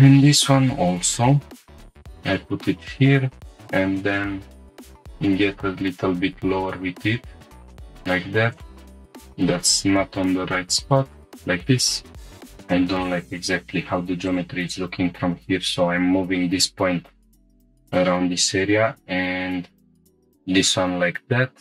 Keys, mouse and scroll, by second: 0.8 g, 1.3 x, 1.9 click, 2.8 scroll up 2, 3.8 g, 4.0 z, 7.6 click, 8.5-8.8 alt+drag, 9.0 x, 9.0 s, 10.9 shift+click, 12.2 click, 12.2 scroll down 3, 12.2 g, 12.3 g, 14.3 shift+click, 17.2-17.6 scroll up 2, 17.9 click, 18.7 g, 18.9 g, 20.0 shift+click, 20.2 scroll down 2, 21.1-21.6 scroll up 2.